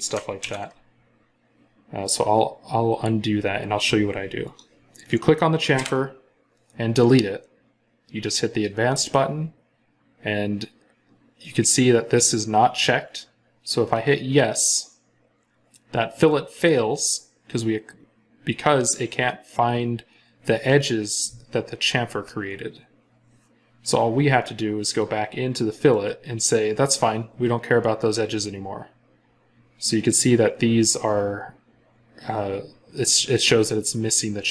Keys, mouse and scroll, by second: 0.2 ctrl+z, 5.6 Delete, 25.8 right click.